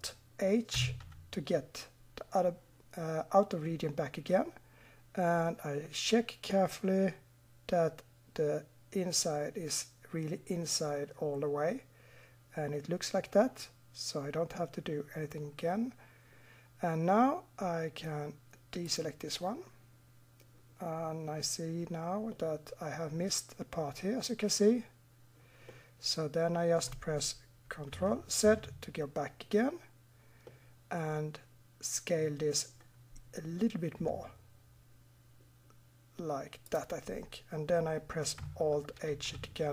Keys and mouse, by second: 0.8 alt+h, 18.8 click, 22.4-27.7 middle drag, 28.4 ctrl+z, 30.8 middle click, 32.0 click, 34.0 s, 38.7 middle click, 39.1 alt+h.